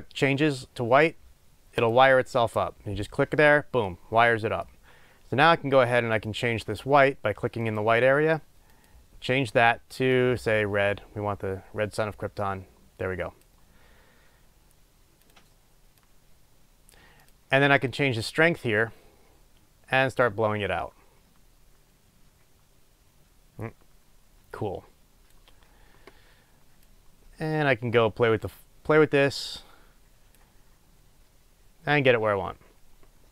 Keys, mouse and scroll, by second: 1.9 click, 6.2 click, 7.8-10.2 drag, 18.0-33.3 drag.